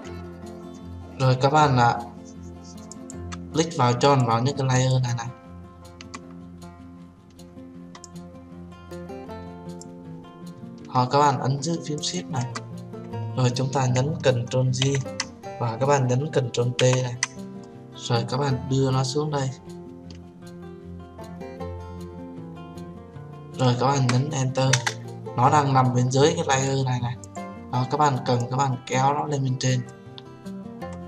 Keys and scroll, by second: 15.1 ctrl+j, 17.1 ctrl+t, 25.1 Return.